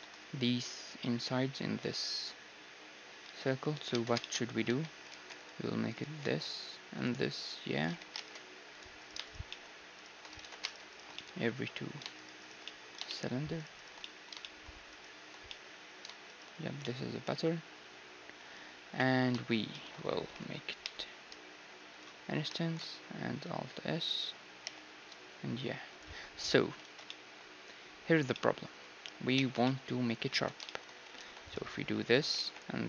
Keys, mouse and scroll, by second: 3.2 z, 3.4 middle click, 3.7-5.9 right drag, 3.9 Tab, 4.6 z, 5.1 ctrl+r, 5.9 middle click, 6.2 ctrl+r, 7.8 z, 8.1 ctrl+Tab, 9.0-11.0 right drag, 9.5-11.0 drag, 10.4 ctrl+z, 11.0-15.8 middle drag, 11.5-18.1 right drag, 18.1 middle click, 18.9 KP_1, 19.7-22.0 middle drag, 20.8 i, 22.5 alt+s, 24.2 alt+s, 24.6 i, 26.8 ctrl+z, 27.0-32.8 middle drag, 29.3 Tab, 30.5 Tab, 31.1 ctrl+r, 32.3 ctrl+r.